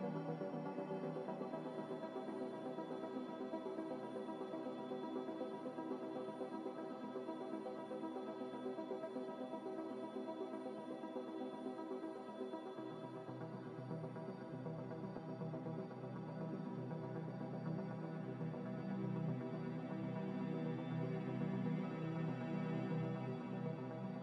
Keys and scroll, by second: 23.3 n.